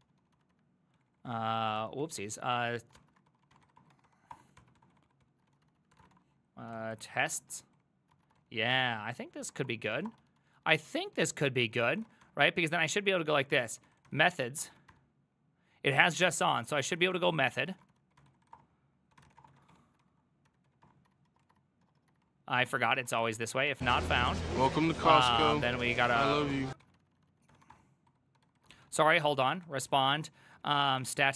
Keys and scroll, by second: 0.0-31.3 typing, 3.0 ctrl+c, 9.1 ctrl+c, 9.4 ctrl+c, 28.8 ctrl+c.